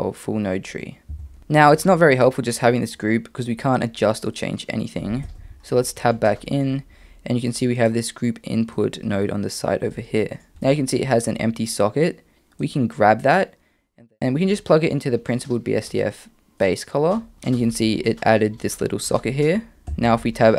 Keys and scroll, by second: 1.1 Tab, 5.2 Tab, 19.9 Tab.